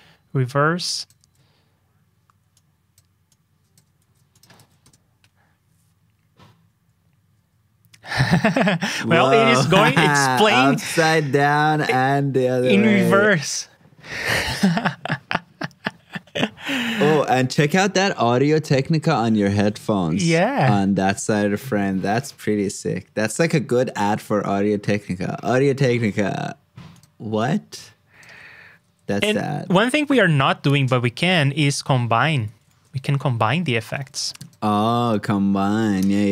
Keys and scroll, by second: 1.2 super+v, 3.9 super+c, 4.5 super+v, 29.6 alt+shift+Down.